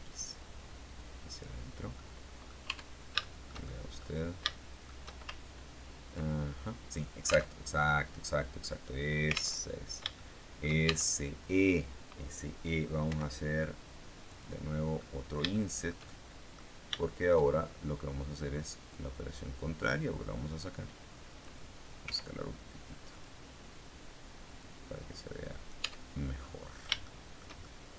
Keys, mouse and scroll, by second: 1.2 click, 1.5-1.9 scroll down 1, 1.9 middle click, 2.5 Tab, 3.1-4.1 shift+middle drag, 4.3 shift+middle click, 7.4 alt+Tab, 9.5 alt+Tab, 10.1 shift+middle click, 10.8 shift+Tab, 13.0 i, 14.2 click, 14.9-16.6 middle drag, 16.9 shift+middle click, 17.6-18.2 shift+scroll up 3, 19.0-21.5 drag, 21.9 s, 23.0 click, 24.5-25.8 drag, 25.7 Tab, 26.3 click, 26.9 shift+middle click, 27.2 shift+click, 27.5 shift+middle click, 27.8 shift+click.